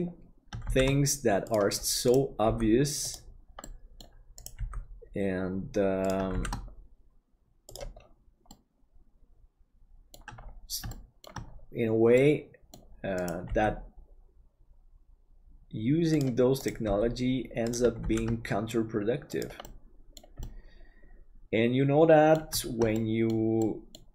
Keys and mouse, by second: 0.7 shift+d, 2.5 g, 3.7 middle click, 4.5 g, 6.3 shift+d, 8.5-10.1 middle drag, 10.9 shift+middle click, 12.2 middle click, 13.5 g, 16.8 g, 18.0 shift+d, 19.7 middle click, 20.4-22.4 middle drag, 22.9 middle click, 23.6 middle click.